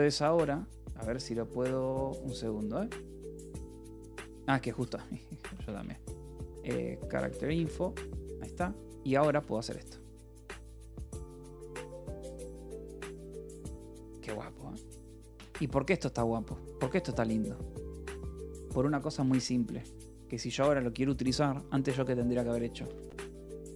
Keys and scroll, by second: 0.0-0.4 typing, 4.8-6.3 typing, 7.4 Escape, 8.1-11.4 typing, 11.6 Escape, 14.3 j, 15.0 a, 15.4 Tab, 15.9 BackSpace, 19.0 h, 19.5 3, 19.9 Return, 22.4-23.7 typing.